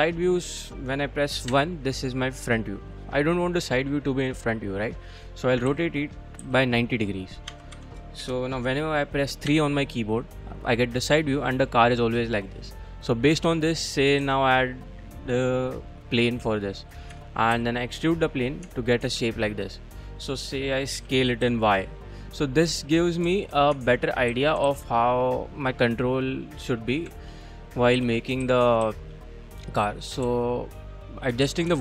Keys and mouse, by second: 1.5 KP_1, 3.6 click, 4.7-5.5 drag, 5.7 r, 6.4 z, 7.5 9, 7.7 0, 8.2 Return, 9.5 KP_3, 14.2 shift+a, 17.1 Tab, 17.5 e, 18.4 click, 18.7 Tab, 19.2 g, 19.8 click, 21.0 s, 21.4 y, 22.1 click, 23.7 Tab, 24.3 a, 24.7 ctrl+r, 26.0 click, 27.1 1, 28.0 a, 29.2 shift+z, 29.2 c, 29.9 click, 30.2 g, 31.0 click, 31.4-31.8 typing.